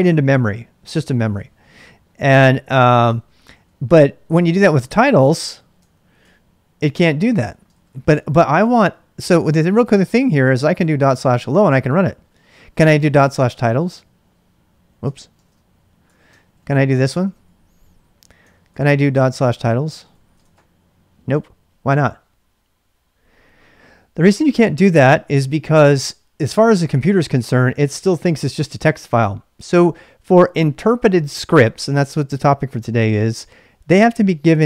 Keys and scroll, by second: 2.5-7.8 typing, 6.2 Return, 9.5-11.2 typing, 12.4-20.7 typing, 16.0 ctrl+[, 18.6 ctrl+c.